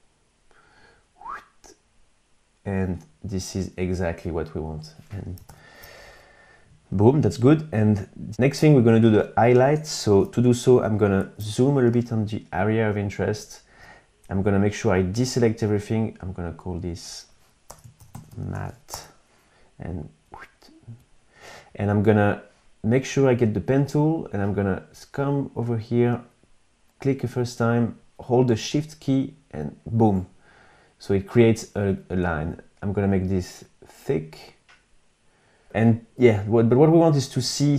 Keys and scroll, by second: 4.8 super+-, 10.5 super+=, 11.2 space, 17.0 Return, 17.1-18.3 typing.